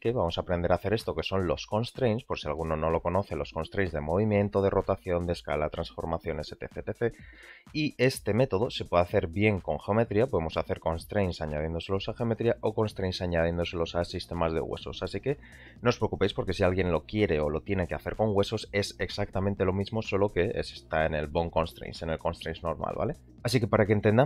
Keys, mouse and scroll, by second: 14.7 w, 15.5 w, 21.9-22.2 shift+middle drag, 23.3-23.9 middle drag.